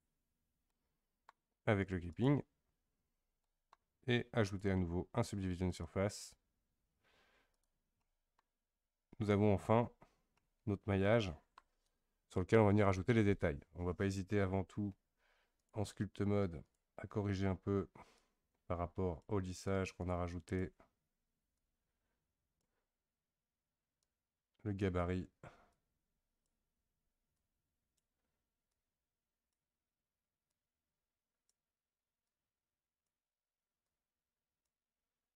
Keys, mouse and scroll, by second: 0.0 click, 0.7-2.1 middle drag, 2.1 click, 3.4-4.5 middle drag, 5.8-7.6 drag, 8.0-9.6 middle drag, 9.6 Tab, 10.4-12.1 middle drag, 12.1 KP_1, 15.6-35.3 drag.